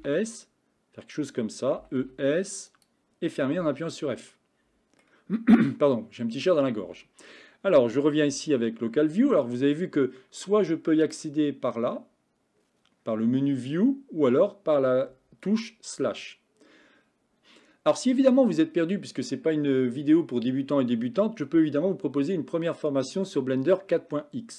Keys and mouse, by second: 1.9 e, 3.7 f, 4.3 middle click, 6.9 Tab, 11.3-14.4 drag.